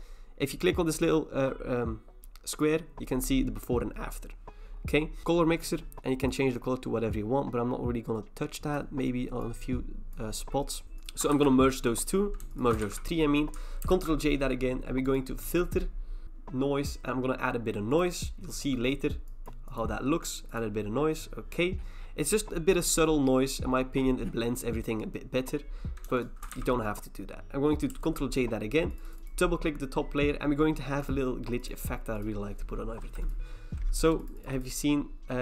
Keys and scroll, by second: 10.8 Return, 11.3 ctrl+e, 12.8 ctrl+e, 13.9 ctrl+j, 26.5 ctrl+e, 27.9 ctrl+j.